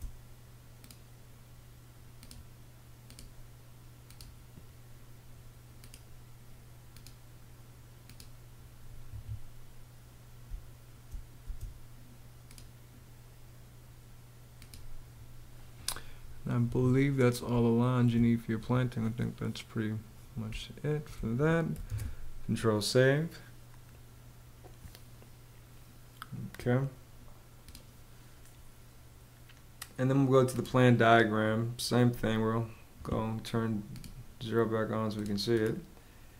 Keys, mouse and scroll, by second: 8.6 Escape, 10.0 space, 16.2 Escape, 17.0 space, 20.0 space, 21.4 super+s.